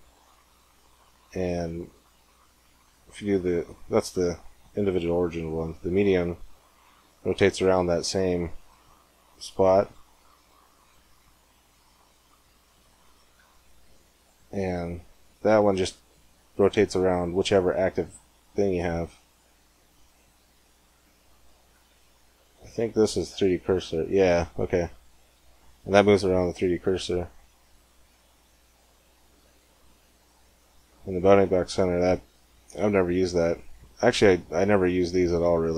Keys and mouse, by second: 0.3-2.1 drag, 6.2 r, 10.7-12.5 drag, 13.2 r, 18.7-20.7 drag, 21.6 r, 22.9-24.7 drag, 23.4 r, 26.6-28.5 drag, 29.3 r, 31.7-33.3 drag, 35.2-35.7 drag.